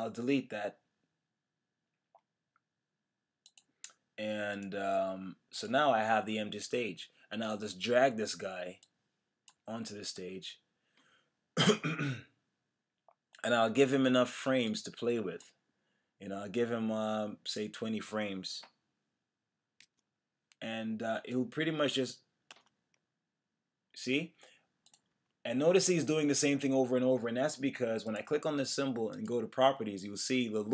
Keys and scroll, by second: 19.8 F5, 22.5 Return, 25.1 Return.